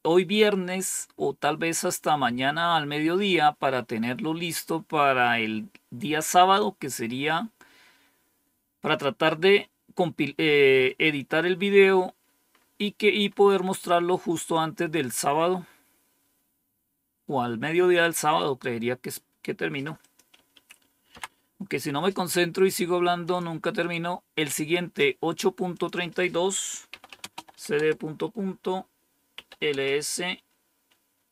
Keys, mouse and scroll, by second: 4.6 scroll down 1, 5.1-5.9 scroll down 2, 12.4-13.0 scroll up 1, 13.0-14.0 scroll up 1, 14.0-14.9 scroll down 1, 15.4-16.3 scroll up 1, 19.9 click, 20.2 Up, 21.0 Down, 23.1 click, 25.6 click, 26.6-27.9 typing, 29.0-29.7 typing, 31.0-31.3 typing.